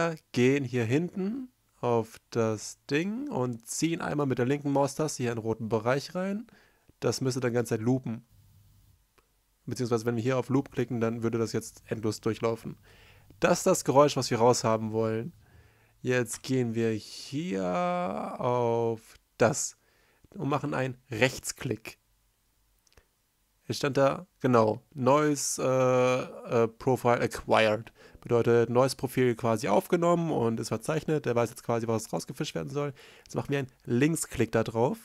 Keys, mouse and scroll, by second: 6.6 l, 6.8 space, 9.7 l, 11.5 space, 15.8 r, 18.9 right click, 19.0 right click.